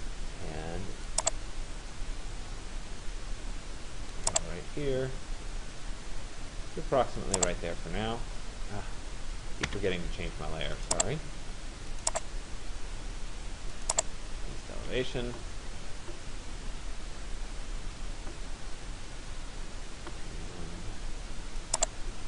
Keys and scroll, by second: 9.4 Return, 14.4 Escape.